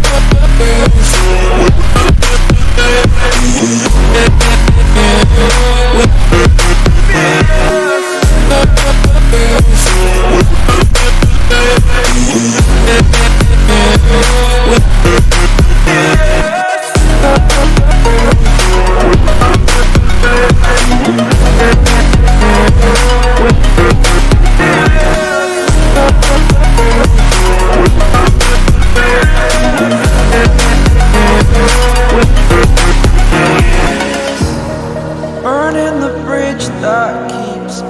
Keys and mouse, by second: 8.0 click, 11.3 click, 11.7 right click, 12.2 click, 12.9-14.0 drag, 17.2 ctrl+t, 18.1 click, 19.8 Return, 20.6 right click, 21.9 click, 23.6 click, 25.9 ctrl+t, 26.6 click, 28.5 click.